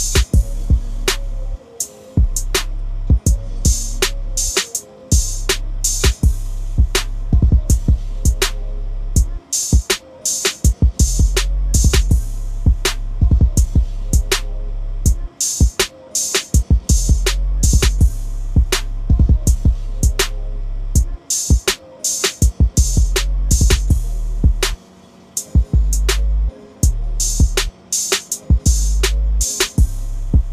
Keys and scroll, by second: 6.2 typing, 26.4 ctrl+shift+i.